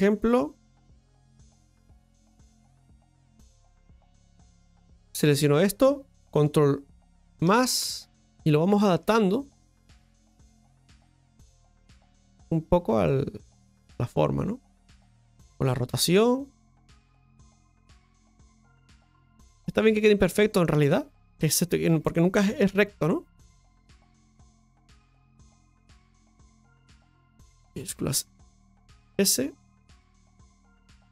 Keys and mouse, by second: 2.3 KP_Divide, 3.9 right click, 4.4 middle click, 5.3-7.0 right drag, 7.0 ctrl+KP_Add, 8.7-11.6 middle drag, 11.6-14.0 drag, 14.0-16.8 middle drag, 18.9 middle click, 19.9 right click, 20.2 shift+middle click, 22.6 ctrl+KP_Add, 27.1 r, 28.2 shift+s.